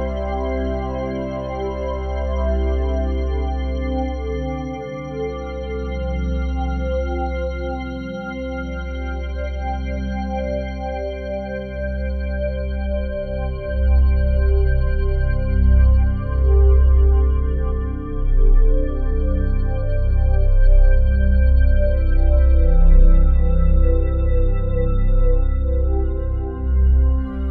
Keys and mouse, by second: 1.7 click, 3.1 ctrl+z, 4.1-5.8 drag, 5.8 m, 7.7-9.9 drag, 9.9-11.4 right drag, 11.4-12.5 drag, 12.6-13.9 alt+drag, 13.7 ctrl+s, 15.0-18.3 alt+drag, 17.5 typing, 18.6-23.4 alt+drag, 24.9-26.6 drag, 24.9 typing.